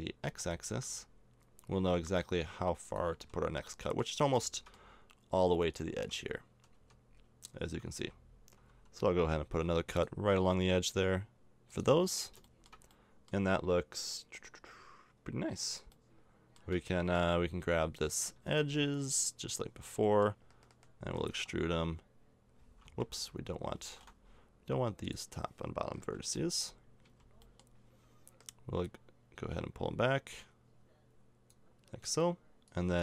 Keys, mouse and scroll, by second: 3.1 z, 5.9 Tab, 6.2-7.6 right drag, 6.7 z, 8.0 a, 9.4 ctrl+r, 12.1 middle click, 14.9-15.9 middle drag, 18.5-21.0 right drag, 21.2 middle click, 21.3 e, 23.4-25.0 middle drag, 25.0-26.3 drag, 26.2 b, 27.1 b, 27.9-29.3 middle drag, 31.9 middle click, 32.7 click.